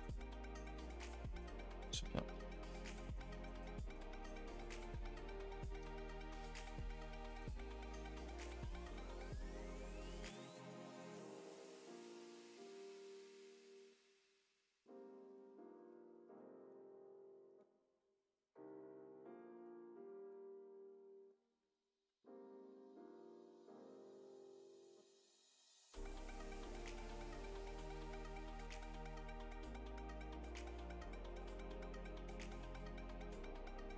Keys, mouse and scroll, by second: 0.5 middle drag, 5.6 click, 9.4 click, 9.6 click, 9.9 click, 10.1 click, 13.0 click, 26.6 click, 27.5 click, 28.1 click.